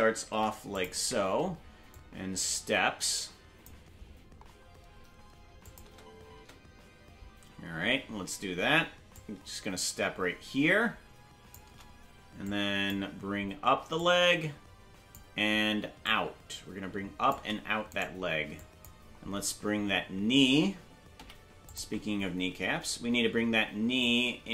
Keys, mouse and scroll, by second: 1.9-3.6 drag, 4.3-5.6 scroll up 3, 5.6 click, 5.8 space, 6.9 space, 8.0-9.0 scroll down 1, 9.1-11.5 shift+drag, 12.4 click, 13.9-15.1 drag, 16.0-17.3 shift+drag, 17.9 right click, 18.5 click, 19.8 scroll down 1, 21.1 scroll down 1, 21.1 i, 22.3-22.9 scroll up 1, 22.9 scroll down 1, 24.0-24.5 drag.